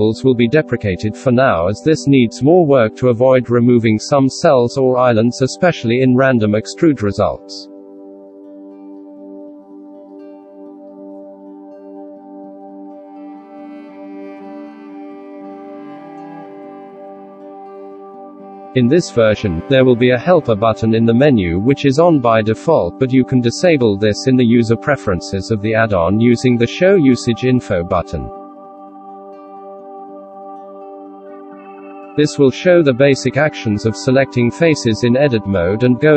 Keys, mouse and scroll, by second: 11.0 shift+q, 13.0 ctrl+[, 16.4 F4, 31.0 shift+q.